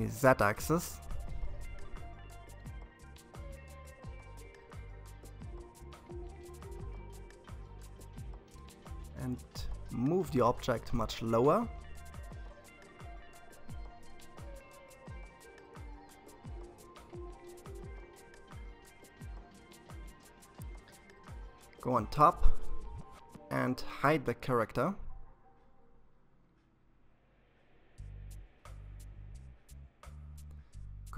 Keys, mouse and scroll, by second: 5.4 scroll up 2, 7.1 g, 14.0-17.0 middle drag, 18.9 KP_7, 22.0 click, 29.0 KP_3, 30.8 ctrl+r.